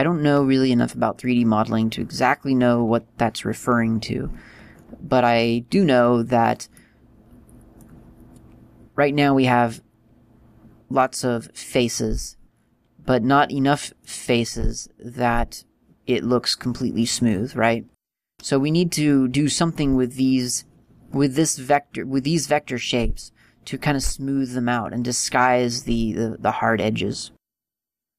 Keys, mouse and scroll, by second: 5.9 scroll up 2, 6.6 middle click, 6.6-7.5 scroll up 1, 13.0 middle click, 16.0-16.8 scroll down 3, 17.6-18.2 scroll down 1, 18.2 middle click.